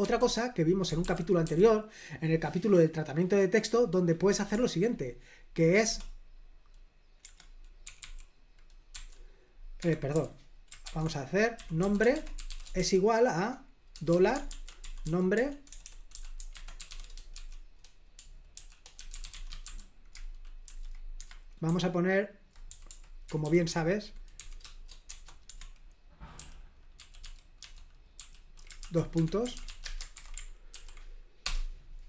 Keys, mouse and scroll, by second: 0.0 typing, 1.0 super+l, 1.4 o, 4.5 n, 5.8 BackSpace, 7.2 Escape, 7.8 d, 8.0 d, 8.9 o, 9.8 Escape, 10.1-24.4 typing, 21.2 Escape, 25.4 Escape, 26.3-30.0 typing, 29.1 Escape, 30.1 super+h, 30.7 ctrl+p, 31.4 Return.